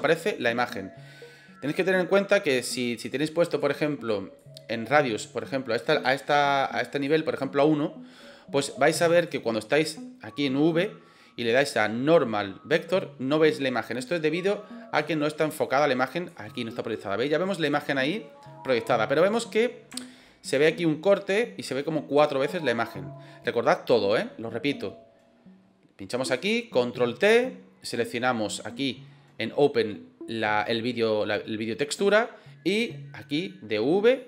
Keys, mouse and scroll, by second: 1.9-3.6 drag, 4.2-7.0 drag, 9.2-9.7 drag, 11.6-12.6 drag, 14.9-16.3 drag, 20.0 shift+middle click, 26.1 click.